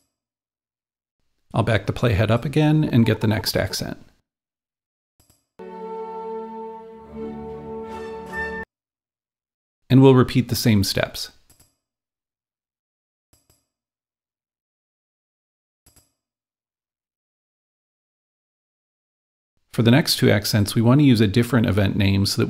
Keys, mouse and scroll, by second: 0.0 click, 2.6-5.2 drag, 5.2-7.2 drag, 8.5-10.4 drag, 11.7-13.3 drag, 13.4-15.4 drag, 16.1-18.1 drag, 16.8-19.1 typing, 20.5 click, 20.5 d.